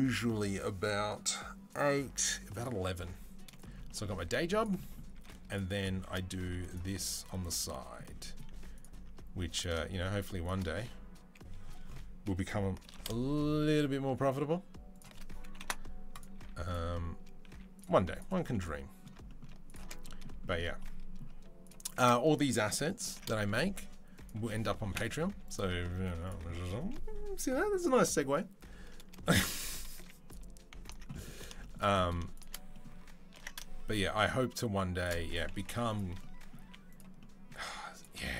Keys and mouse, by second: 3.6 shift+click, 3.8-5.0 middle drag, 4.0 z, 5.0 z, 6.5 alt+click, 8.6 alt+click, 9.5 alt+shift+click, 12.6 ctrl+b, 15.4 Delete, 16.2 z, 17.3 z, 18.2-19.3 middle drag, 19.7-21.2 middle drag, 21.8-24.2 middle drag, 22.9 ctrl+b, 25.8 z, 28.9 shift+middle click, 29.8 z, 30.6 alt+click, 33.2 ctrl+b, 35.4 Delete, 35.8-38.3 middle drag, 36.4 z, 37.4 z.